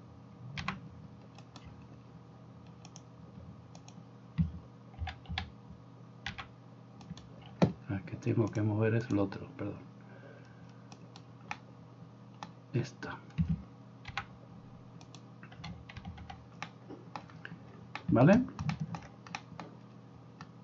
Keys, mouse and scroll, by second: 0.7 g, 2.9-20.6 drag, 5.0 a, 5.4 a, 6.4 g, 11.1 right click, 14.1 g, 16.0 g.